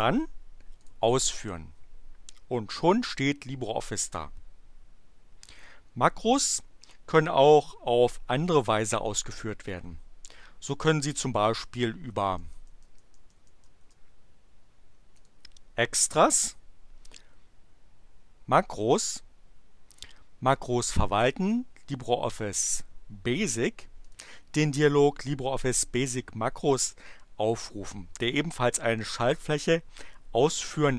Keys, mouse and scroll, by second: 0.8 click, 12.1 BackSpace, 15.2 click, 24.0 click.